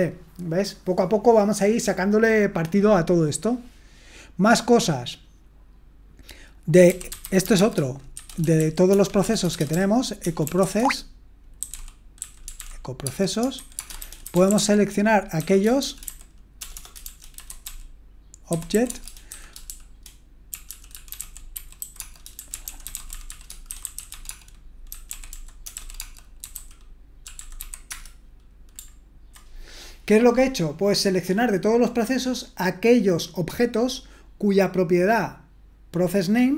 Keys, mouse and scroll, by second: 3.6-4.3 scroll down 1, 4.3-6.2 scroll down 1, 6.2-6.8 scroll down 1, 6.6-27.9 typing.